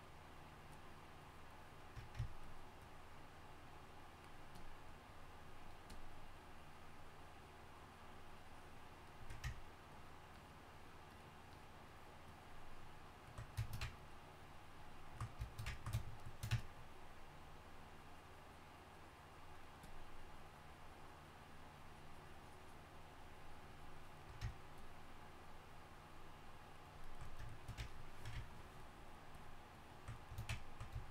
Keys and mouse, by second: 16.0-31.1 drag.